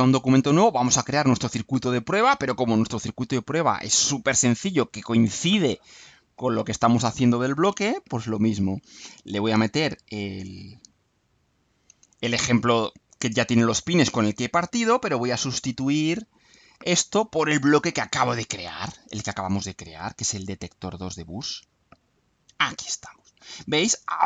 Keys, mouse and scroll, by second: 0.7-4.1 drag, 11.0 click, 13.8-15.2 drag, 15.9 Delete, 18.8 click, 20.8 click, 21.7 click, 23.4 click.